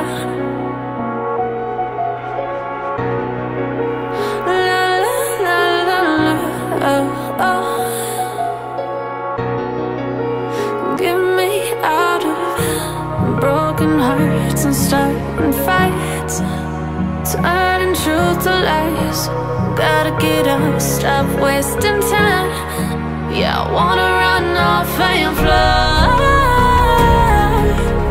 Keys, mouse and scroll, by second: 0.9 3, 2.8-4.2 drag, 4.8 b, 6.3 b, 7.6 click, 8.0 b, 9.3 b, 13.6 click, 14.1-14.5 scroll up 1, 14.5 scroll down 3, 15.0-16.3 middle drag, 16.3 scroll up 2, 17.2-20.0 drag, 21.1 ctrl+click, 22.3 middle click, 22.8 scroll up 2, 23.3 ctrl+click, 24.2-25.6 middle drag, 25.6 ctrl+click, 26.8 middle click, 27.7 ctrl+click.